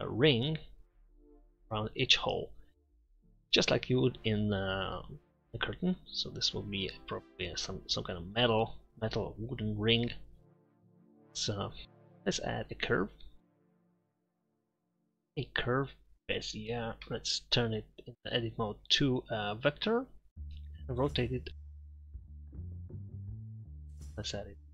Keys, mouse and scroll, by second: 4.9 middle click, 11.8 ctrl+a, 13.9 shift+a, 17.1 Tab, 21.1 r, 22.0 Tab, 22.2 r, 22.7 Tab, 22.8 s, 23.0 Tab.